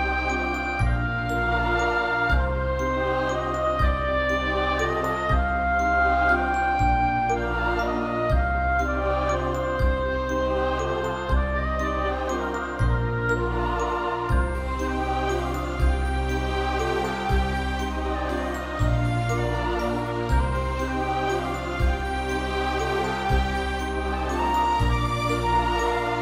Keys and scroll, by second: 1.1 0, 1.7 ctrl+0, 8.1 Right, 8.4 Left, 25.3 x.